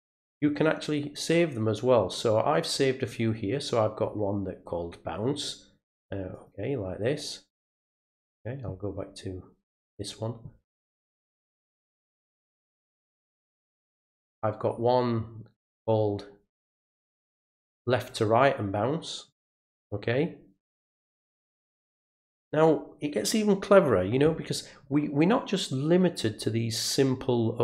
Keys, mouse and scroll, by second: 2.2 click, 5.4 click, 6.3 click, 9.7 click, 10.9 right click, 12.6 click, 14.2 click, 17.9 click, 19.3 click.